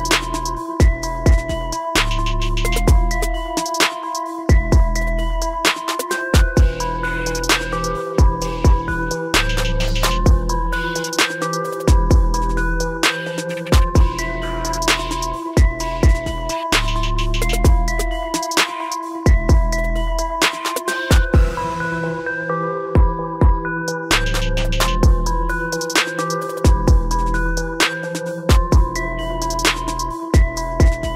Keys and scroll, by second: 9.0 ctrl+-, 12.2 ctrl+shift+i, 26.2 ctrl++.